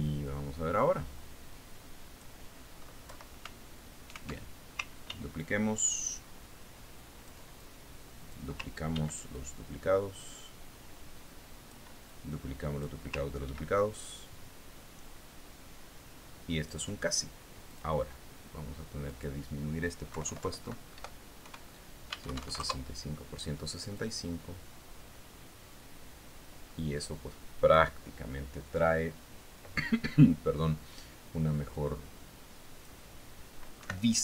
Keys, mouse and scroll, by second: 0.6-3.9 drag, 4.6 BackSpace, 6.6 ctrl+d, 6.9-9.1 ctrl+drag, 9.3 click, 10.9 ctrl+d, 10.9-14.7 ctrl+drag, 15.0 ctrl+d, 15.3-18.3 ctrl+drag, 19.2 click, 20.6 click, 21.6 Left, 22.4 Delete, 22.9 KP_6, 23.6 Tab, 23.9 KP_6, 24.0 KP_5, 24.1 KP_Enter, 25.4-29.4 drag, 33.3-34.2 drag.